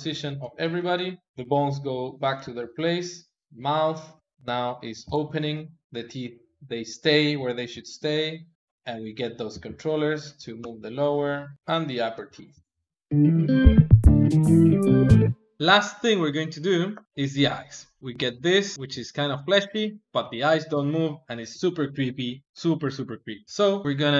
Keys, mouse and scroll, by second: 0.1 alt+r, 0.4 alt+g, 0.6 alt+s, 1.4 click, 1.7 click, 1.9 KP_3, 2.3 r, 4.3 middle click, 5.0 ctrl+Tab, 5.4-7.5 middle drag, 7.5 alt+shift+z, 8.2 click, 8.5 r, 8.9 click, 9.4 g, 11.1 click, 11.6 g, 12.1 KP_3, 15.6 alt+g, 16.1 middle click, 17.0 click, 17.9 click, 18.0 g, 21.4 g, 23.8 alt+g.